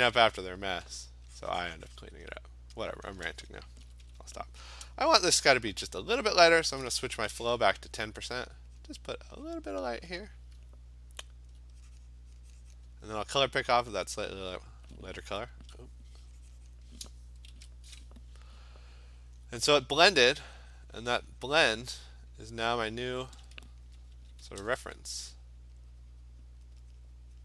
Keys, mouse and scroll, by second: 0.1 alt+click, 0.9 alt+click, 1.0 alt+click, 1.5 click, 1.6 click, 2.0 click, 2.8 alt+click, 3.8 ], 4.0 ], 4.2 ], 7.1 shift+1, 8.8 click, 9.4 click, 11.5 alt+click, 11.6 alt+click, 12.7 click, 13.5 alt+click, 14.4 click, 15.5 ctrl+z, 16.7 click, 17.5 ctrl+z, 19.3 alt+click, 21.5 click, 22.8 click, 24.4 [, 24.6 [, 24.8 [, 25.5 click, 26.6 click, 27.0 click.